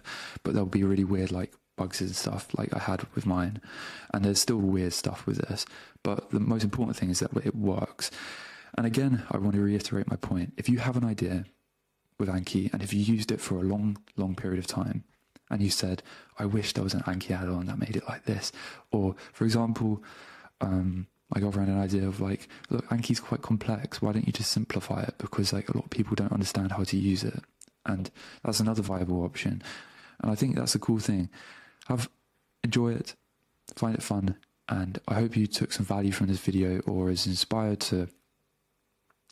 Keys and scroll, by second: 1.3-5.4 typing, 5.0 Return, 5.9 Left, 6.5 Return, 6.7 BackSpace.